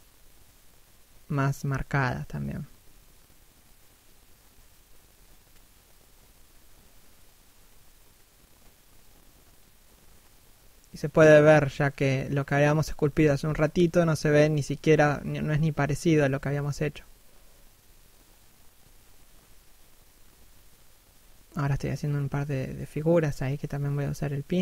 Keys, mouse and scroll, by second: 0.0 shift+middle click, 0.7 scroll up 1, 0.9 middle click, 1.8 scroll up 1, 2.0 click, 2.8 shift+middle click, 3.2 click, 4.5 scroll down 1, 4.7 middle click, 5.9 scroll up 1, 6.1 d, 6.5 click, 7.2 middle click, 8.0 s, 8.2 click, 9.4 shift+middle click, 9.9 click, 10.7 scroll down 1, 10.8 middle click, 11.5-12.1 scroll up 1, 12.1 d, 12.2 scroll up 1, 12.6 f, 12.9 click, 13.0 shift+middle click, 13.5 shift+click, 14.1 middle click, 15.0 shift+click, 15.7 shift+middle click, 16.3 shift+click, 17.2 shift+click, 17.8 shift+middle click, 18.5 shift+click, 19.6 shift+click, 20.5 middle click, 22.0 scroll down 1, 22.5 p, 22.9 scroll up 1, 23.1 click.